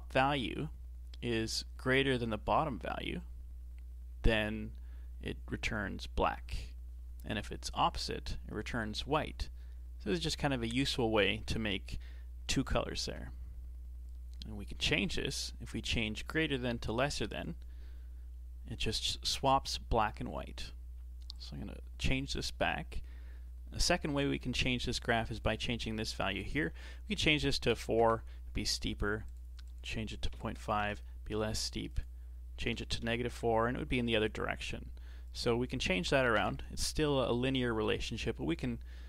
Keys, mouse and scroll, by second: 15.8-18.8 drag, 21.3-23.8 drag, 25.3-28.4 drag, 29.3 click, 29.7-34.9 drag, 35.3-38.3 drag.